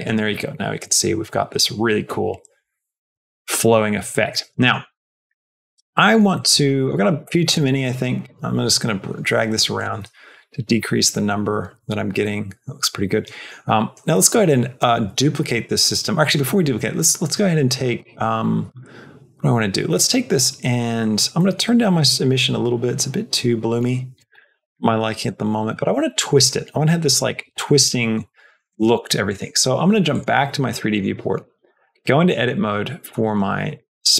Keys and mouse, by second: 4.2 space, 5.3 shift+middle click, 5.9 middle click, 6.3 middle click, 6.5 middle click, 7.4-9.7 drag, 9.8 space, 13.0 space, 14.1 shift+middle click, 21.0 middle click, 21.9-24.1 drag, 24.2 middle click, 24.6 shift+middle click, 29.1 click, 30.8 shift+middle click, 31.1 middle click, 31.6 Tab, 31.9 shift+middle click, 32.5 middle click, 33.7 shift+middle click.